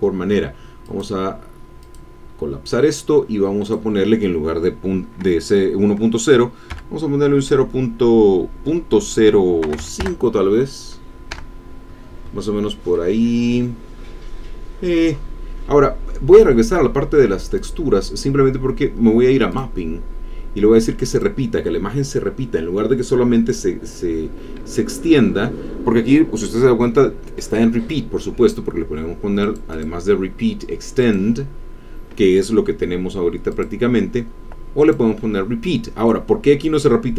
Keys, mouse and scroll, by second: 0.8 click, 1.8 click, 3.6 click, 9.6 KP_0, 9.8 KP_5, 11.3 KP_Enter, 12.9-15.1 middle drag, 15.1 scroll up 1, 17.5 click, 18.2-18.8 scroll down 1, 19.5 click, 19.9-20.6 scroll down 2, 21.1-26.4 drag, 29.5 click, 31.0 click, 33.5 click, 34.8 click.